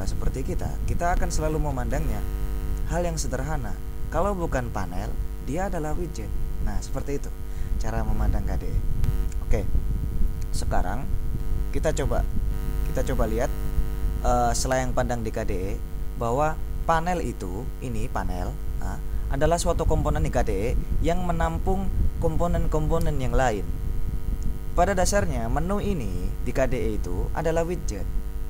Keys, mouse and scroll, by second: 26.7 click, 27.9 click.